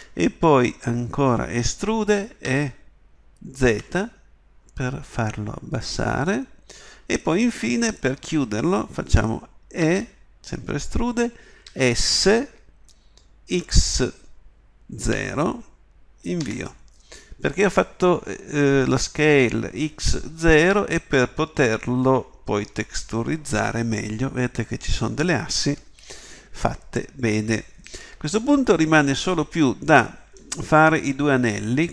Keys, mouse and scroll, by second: 2.5 e, 9.8 e, 28.0 middle click, 28.4-29.6 middle drag.